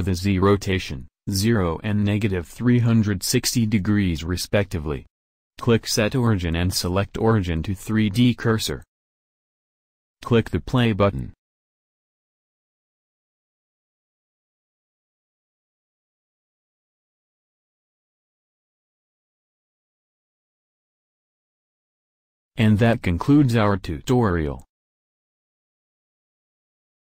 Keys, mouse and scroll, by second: 4.4 i, 4.6-7.6 drag, 12.8 drag, 14.0 click, 16.4 KP_1, 16.5 KP_7, 16.9 z, 18.9 click, 21.3 z.